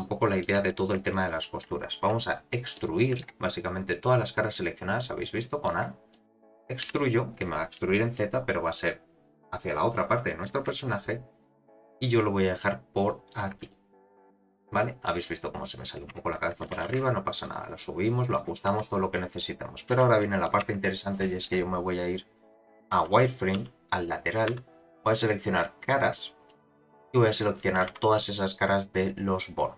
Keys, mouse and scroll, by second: 0.7 shift+middle click, 2.2-2.7 scroll down 2, 2.7 middle click, 2.7 scroll down 1, 3.9-5.7 middle drag, 6.1 middle click, 6.9 e, 13.7 middle click, 14.7 middle click, 16.1 Tab, 16.7 g, 17.8 middle click, 18.7 z, 19.1 middle click, 19.9 z, 20.2 middle click, 20.6 Tab, 21.2 middle click, 22.5 click, 22.9 z, 23.6 1, 24.5 3, 25.6 click, 26.9 middle click, 27.9 z, 28.1-29.7 middle drag.